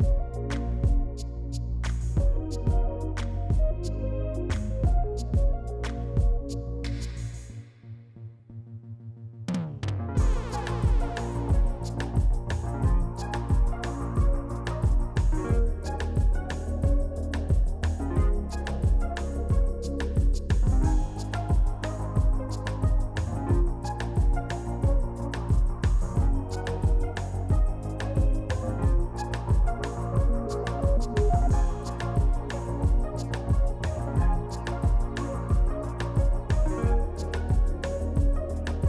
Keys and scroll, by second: 3.0 t, 6.1 f, 7.8 4, 8.9 z, 13.9 f, 15.9 Delete, 16.2 F4, 18.7 s, 19.9 c, 23.7 s, 30.1 z, 30.8 z, 31.0 s, 32.6 ctrl+z, 35.9 s, 36.3 shift+r, 36.8 s, 38.0 r.